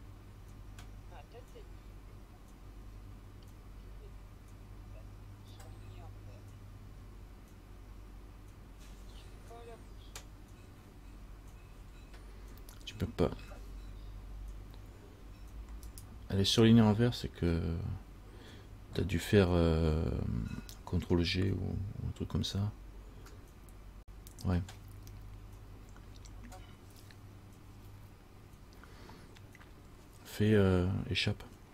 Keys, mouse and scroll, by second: 16.1 right click.